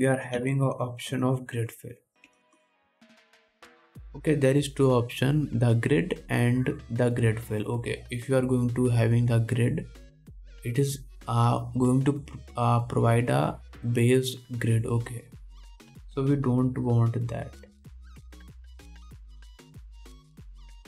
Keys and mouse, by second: 3.7 BackSpace, 6.7-20.8 drag, 17.4 x, 19.9 2.